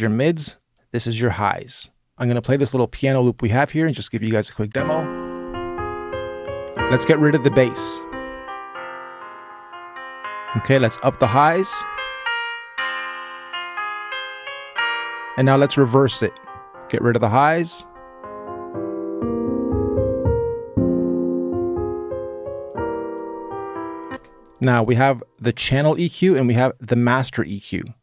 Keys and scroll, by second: 2.1 BackSpace, 4.5 space, 23.9 space.